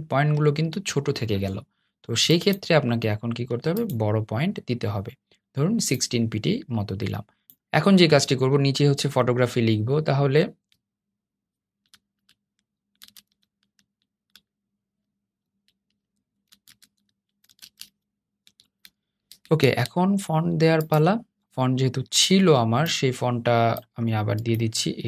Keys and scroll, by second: 10.7 t, 19.3 super+a.